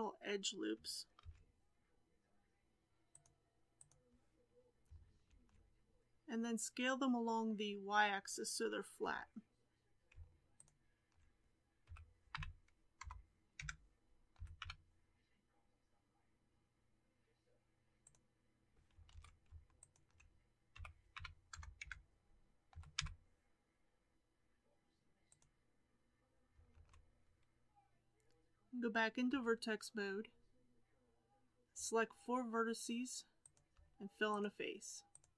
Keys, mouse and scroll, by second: 1.1 ctrl+r, 5.2 alt+a, 9.0 2, 10.5 alt+click, 11.8 s, 14.3 g, 19.0 alt+a, 19.7 alt+click, 20.6 s, 22.6 g, 26.6 alt+a, 29.3 1, 33.3 click, 34.3-35.1 shift+drag.